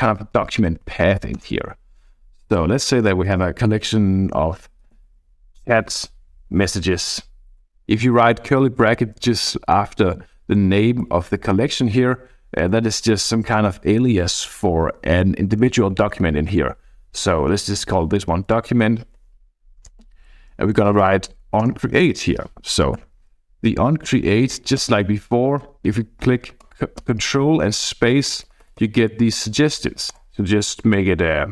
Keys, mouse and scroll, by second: 0.0 Left, 0.2 Left, 0.4 Left, 0.5 Left, 0.7 Left, 0.9 Left, 1.4 Return, 1.9-2.5 Right, 2.7 Right, 2.9 Right, 3.3 Right, 4.1-6.1 typing, 7.6 {, 7.8 Left, 7.8 Left, 8.2 Left, 8.4 Right, 8.6 Right, 9.2 shift+Right, 9.5 shift+Right, 10.1 shift+Left, 11.0 Left, 11.3 Right, 12.5-14.0 typing, 18.3 Right, 18.5 Right, 19.2 Right, 19.8 Return, 20.0 ., 21.3 Down, 21.6 Return, 23.0 ctrl+alt+i, 24.1 Right, 24.4 Left, 24.8 ctrl+space, 27.1 ctrl+space, 28.1 Down, 28.3 Down, 28.5 Down, 28.6 Down, 28.8 Down, 29.4 Down, 30.1 Return.